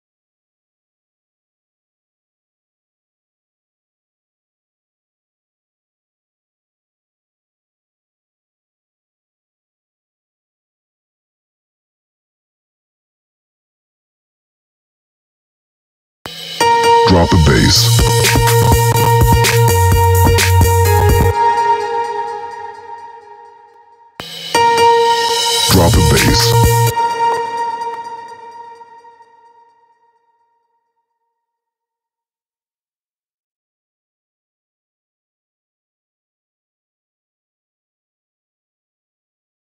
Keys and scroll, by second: 15.6 space, 20.7 space, 23.6 space, 27.2 space.